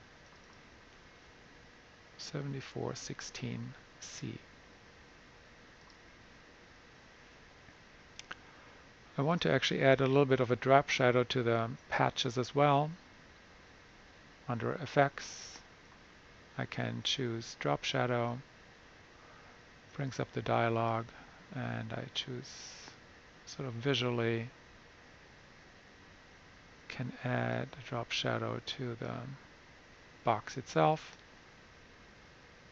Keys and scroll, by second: 2.0-2.9 typing.